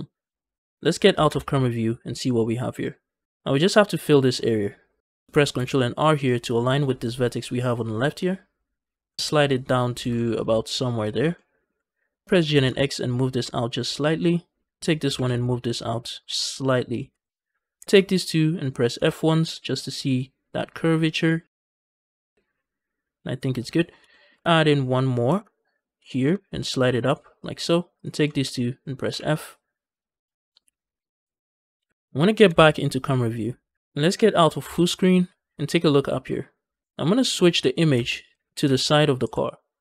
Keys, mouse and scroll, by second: 1.1 KP_0, 2.1-3.2 middle drag, 3.2 scroll down 2, 5.2 middle click, 5.4 ctrl+r, 6.3 right click, 9.0 middle click, 9.2 scroll up 1, 9.5 middle click, 9.8 g, 10.0 g, 10.9 shift+click, 11.2 middle click, 11.6 z, 12.2 g, 12.3 x, 13.7 shift+click, 14.0 middle click, 14.8 click, 14.9 g, 15.1 x, 16.8 shift+click, 17.1 middle click, 17.8 click, 17.9 shift+click, 18.8 f, 19.1-23.7 middle drag, 23.7 scroll up 1, 24.0 shift+middle click, 25.1 ctrl+r, 27.3 shift+click, 27.8 click, 28.2 shift+click, 28.9 f, 29.1-31.8 middle drag, 31.9 KP_0, 32.4 KP_0, 33.7 ctrl+Left, 34.5 ctrl+space, 36.8 Right, 37.8 Right, 38.5 Right, 39.4 Right.